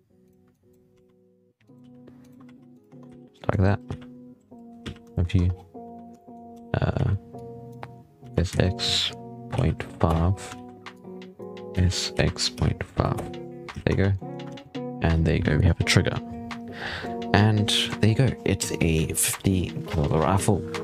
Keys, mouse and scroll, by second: 0.4 click, 0.8-4.7 typing, 2.7 Tab, 3.2 scroll up 1, 3.2-3.5 middle drag, 5.0 shift+middle drag, 5.2 Tab, 5.4-5.9 scroll down 7, 6.0 shift+middle drag, 6.2-6.8 scroll up 7, 6.4 a, 7.2 drag, 8.1 s, 10.8 click, 11.6 s, 13.5 z, 13.7 Tab, 13.8 scroll down 1, 14.0-14.3 middle drag, 14.3 alt+a, 14.6-15.5 middle drag, 15.5-16.8 scroll down 5, 16.8 scroll down 1, 16.9-17.4 middle drag, 17.4 scroll up 1, 17.5-20.0 middle drag, 20.1 middle click, 20.7 scroll down 4.